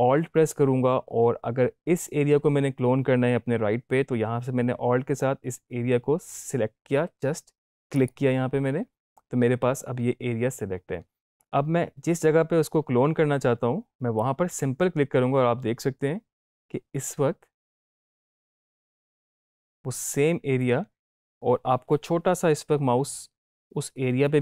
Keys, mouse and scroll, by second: 7.9 alt+click, 14.1-24.4 drag.